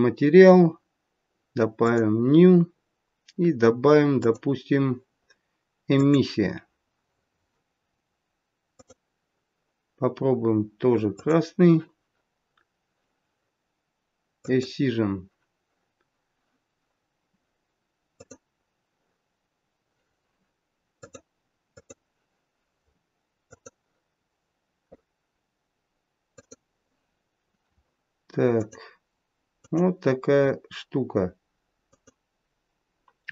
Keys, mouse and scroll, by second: 1.8 click, 4.1 click, 8.7 click, 14.3 click, 18.1 click, 21.0 click, 24.0 click, 26.4 click, 28.6 click, 29.6 click, 31.7 click.